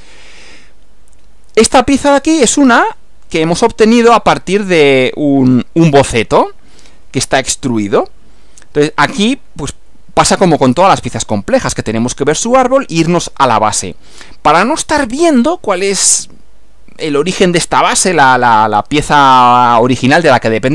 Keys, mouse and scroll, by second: 2.9 click.